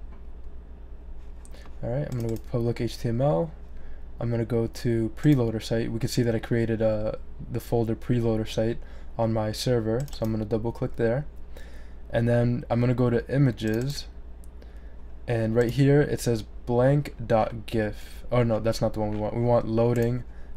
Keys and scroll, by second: 9.6-10.4 typing.